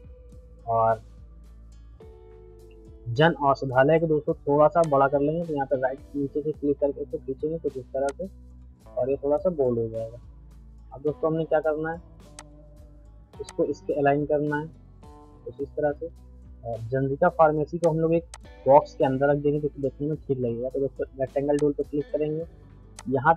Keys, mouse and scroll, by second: 0.7 middle click, 4.8-8.1 drag, 8.1-9.5 shift+drag, 9.5-12.3 middle drag, 12.3 click, 13.8 e, 15.0 Up, 16.0 middle click, 17.8-23.3 drag.